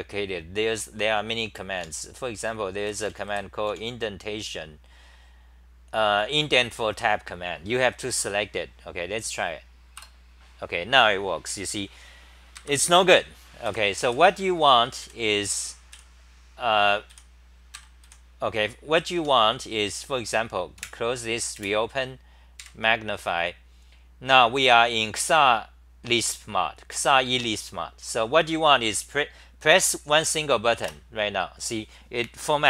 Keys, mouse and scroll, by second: 2.3 a, 10.0 Return, 12.6 ctrl+g, 13.7 f, 14.1 f, 15.0 f, 15.9 f, 17.1 f, 17.7 ctrl+g, 18.1 f, 19.2 Home, 20.8 super+w, 21.7 shift+super+t, 22.6 super+=, 23.7-24.1 scroll down 7, 30.8 Tab.